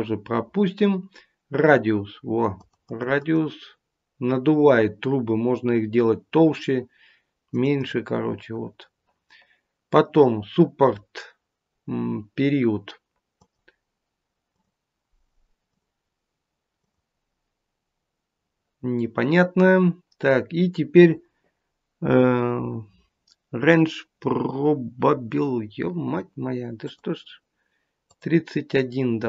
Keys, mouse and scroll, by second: 2.5 click, 3.3 click, 3.5 click, 7.4 click, 8.0 click, 13.3 click, 14.4 click, 15.6 click, 16.7 click, 26.7 click, 28.1 click.